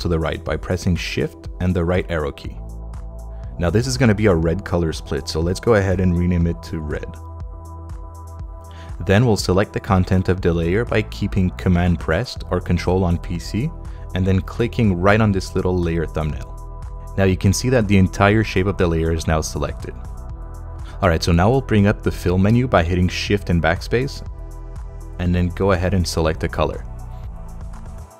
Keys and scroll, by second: 1.4 shift+Right, 6.3-7.5 typing, 7.9 Return, 23.4 shift+BackSpace.